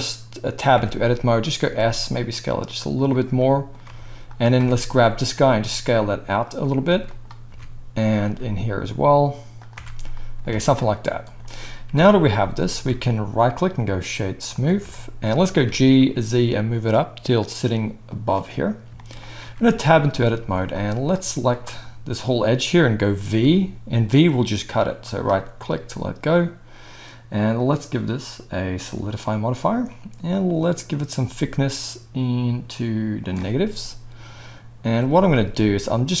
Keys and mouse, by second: 0.7 Tab, 1.6 s, 3.0-4.3 middle drag, 3.8 Tab, 4.3 drag, 4.6 Tab, 4.6-6.9 middle drag, 5.3 s, 6.9 Tab, 7.1 click, 7.5 Tab, 8.2 s, 9.7 Tab, 10.5 alt+a, 11.2 click, 11.3-13.4 middle drag, 11.9 KP_1, 13.4-15.3 right drag, 15.6 g, 19.4 Tab, 20.4 z, 21.1-23.4 drag, 23.4-25.2 middle drag, 23.4 v, 25.2-36.2 drag, 35.0 z.